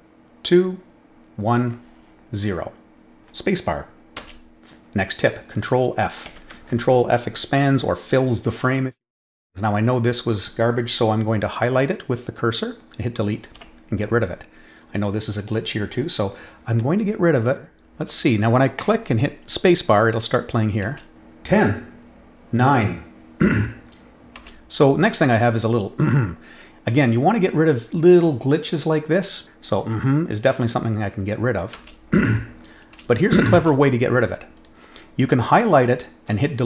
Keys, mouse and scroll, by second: 4.1 space, 6.2 ctrl+f, 9.8 click, 14.8 click, 17.0 click, 17.7 click, 18.7 click, 20.9 space, 25.7-26.5 drag, 28.2 click, 29.8 click, 31.8 space, 33.6 space, 34.5 click, 35.4 click.